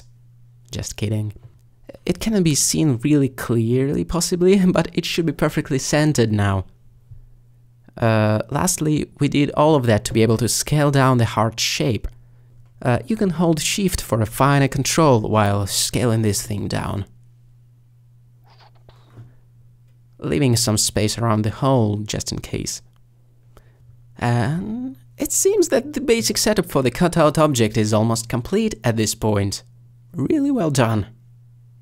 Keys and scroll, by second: 2.3 alt+g, 2.4 alt+z.